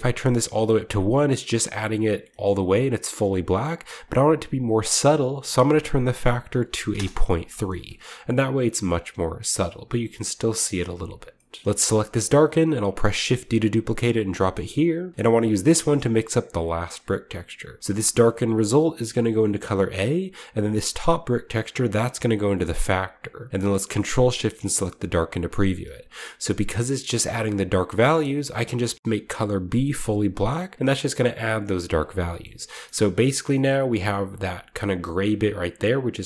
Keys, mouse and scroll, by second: 0.4-2.3 drag, 1.8-2.6 scroll down 2, 2.3-4.0 shift+middle drag, 2.6-3.1 scroll up 1, 4.0-5.2 drag, 5.3 click, 6.5-6.9 typing, 6.9 Return, 7.8 shift+middle drag, 8.0-9.1 shift+scroll up 1, 9.3-10.0 scroll down 1, 10.0-10.5 scroll down 1, 10.5-11.8 shift+middle drag, 11.6-12.9 drag, 12.9 typing, 13.0 shift+click, 14.0-15.1 drag, 14.3-15.4 middle drag, 15.1-16.1 scroll up 1, 15.5 middle click, 16.0-17.6 drag, 17.8 click, 19.9-20.6 drag, 20.7-21.7 drag, 23.0-24.0 drag, 25.3-26.9 ctrl+shift+drag, 26.1-26.5 scroll up 1, 28.5-31.6 drag, 30.9-31.5 scroll down 1, 31.5-34.6 scroll up 3, 32.2-34.6 shift+middle drag.